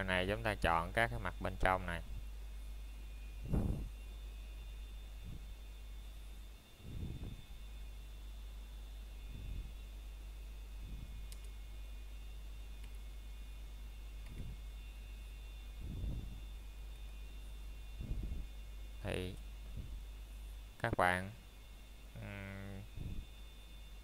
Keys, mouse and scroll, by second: 0.9 scroll up 1, 1.3 middle click, 2.3 scroll up 1, 4.6 middle click, 5.5 scroll up 1, 7.2 middle click, 9.5-9.9 scroll up 1, 10.3 middle click, 13.4 middle click, 13.7 scroll up 1, 16.9-17.4 scroll down 1, 18.3 middle click, 19.6 scroll up 1, 20.6 middle click.